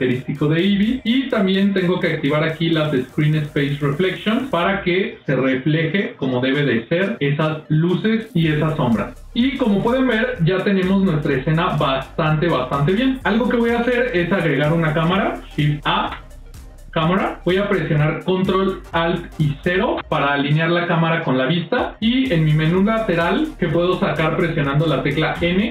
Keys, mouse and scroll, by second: 4.3 click, 4.9 middle click, 6.7 ctrl+middle click, 10.9 middle click, 12.3 ctrl+middle click, 13.0 middle click, 13.9 middle click, 15.8 shift+a, 19.5 ctrl+alt+KP_0, 25.3 n.